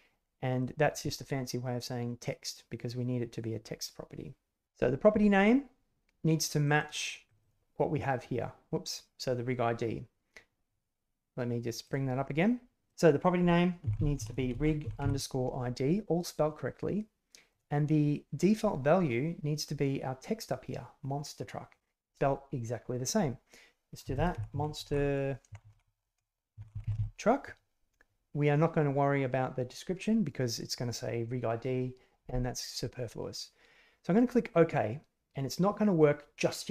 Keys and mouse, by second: 7.2 click, 7.4 click, 11.8-36.7 drag.